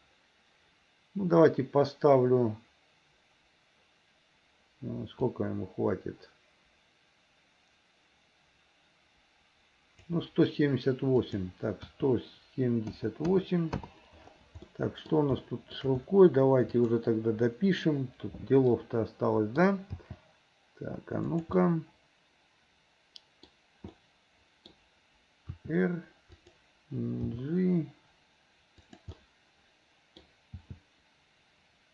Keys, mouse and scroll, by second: 5.4-10.1 drag, 11.3-13.8 drag, 14.7 middle click, 15.4 shift+middle click, 16.7 click, 18.8 middle click, 20.0 g, 21.6-23.5 middle drag, 21.6 scroll up 1, 24.0 middle click, 24.0 scroll up 1, 24.7 scroll down 1, 25.6 r, 27.4 g, 29.1-30.3 middle drag, 30.6 g.